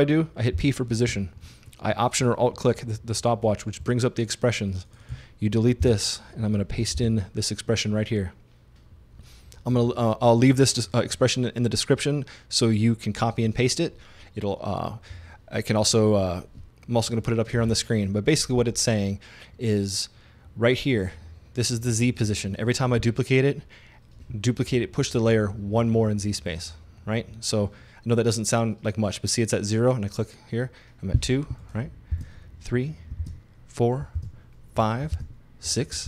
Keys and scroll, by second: 0.6 p, 1.5 alt+p, 5.8 BackSpace, 6.8 super+BackSpace, 7.0 super+v, 32.2 super+d.